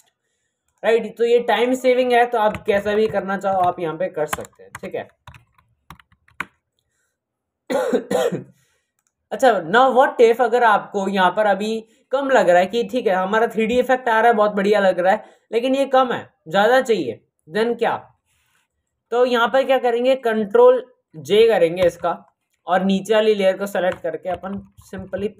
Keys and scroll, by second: 2.7-4.6 typing, 21.7 ctrl+j, 24.2 shift+Left, 24.8 shift+Left.